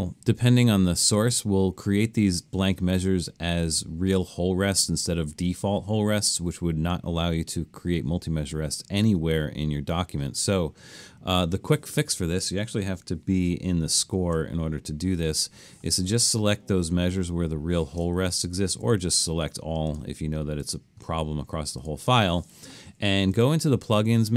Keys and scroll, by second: 13.7 alt+super+/, 18.8 super+a.